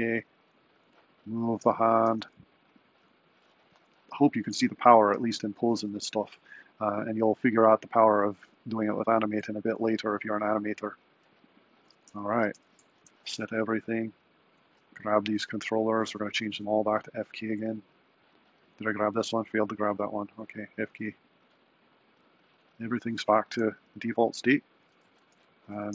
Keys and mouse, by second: 0.9 g, 2.2 r, 5.2 r, 8.6 r, 12.0 a, 12.4 i, 14.3 click, 14.7-16.5 shift+drag, 17.5-18.5 drag, 19.0 click, 20.4-21.4 drag, 25.0 super+s.